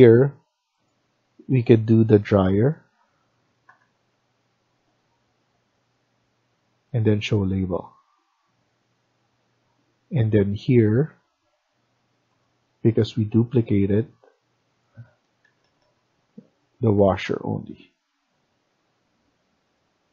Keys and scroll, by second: 3.5 BackSpace, 14.9-16.2 typing.